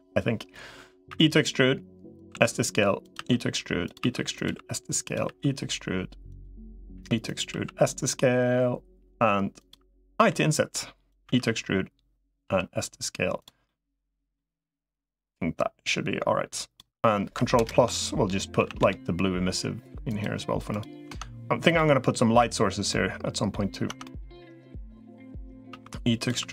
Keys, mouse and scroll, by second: 1.0 e, 2.2-5.2 typing, 7.4 s, 10.0 i, 11.0 e, 12.2 s, 13.5 middle click, 14.6-16.6 drag, 17.4 ctrl+KP_Add, 18.4 a, 18.6 g, 21.0 Tab, 22.7 middle click, 23.8 Tab, 23.8 middle click, 25.6 e, 26.2 s.